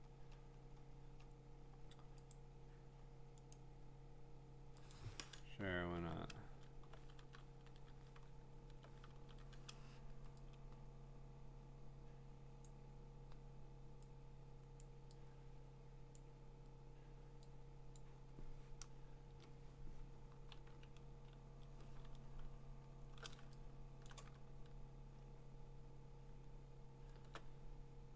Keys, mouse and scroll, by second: 2.0-2.3 scroll down 10, 2.3 click, 3.5 right click, 4.9 click, 5.9 alt+Tab, 7.2 ctrl+v, 8.2-8.7 ctrl+scroll, 9.1 ctrl+t, 12.6 click, 14.8 click, 16.1 click, 18.0 click, 19.3 Return, 20.5 ctrl+[, 22.5-23.3 scroll, 24.1 click, 24.4 scroll, 25.4 scroll, 26.1-26.8 scroll, 27.1 scroll.